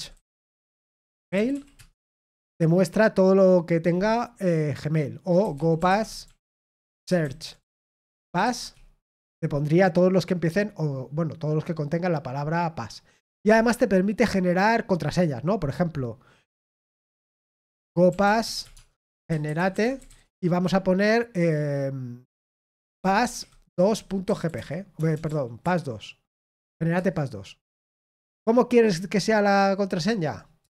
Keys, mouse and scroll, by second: 7.2 typing, 9.7 typing.